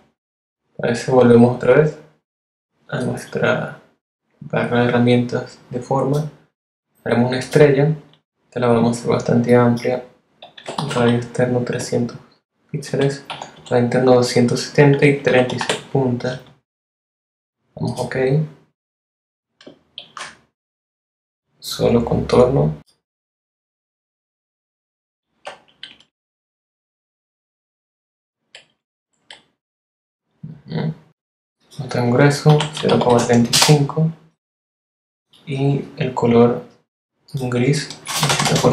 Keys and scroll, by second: 9.7 3, 10.0 0, 11.0 Tab, 11.8-13.2 typing, 14.1 Tab, 14.5 3, 14.8 6, 19.2 shift+x, 24.5 shift+Up, 24.9 shift+Right, 27.9 shift+Right, 31.5-32.6 typing, 32.7 Return, 37.2 BackSpace, 37.8 8, 38.4 Return.